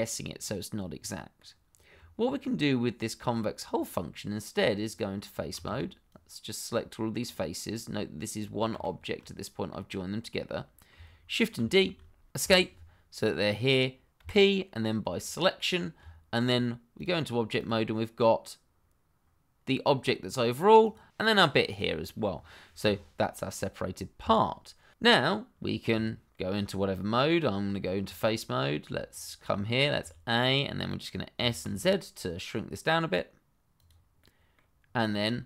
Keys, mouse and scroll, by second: 1.9 Tab, 4.8 click, 5.5 shift+z, 6.0 click, 7.7 middle click, 8.7 shift+z, 9.3 middle click, 11.5 shift+d, 14.2 p, 15.2 click, 16.0 Tab, 16.9 click, 20.8 click, 22.8 g, 24.2 Escape, 25.9 Tab, 29.1 click, 29.6 shift+middle click, 30.0 a, 30.3-31.3 scroll up 1, 31.3 s, 31.6 z, 33.7 click, 34.2 middle click, 34.8-35.1 scroll down 1, 35.1 shift+middle click.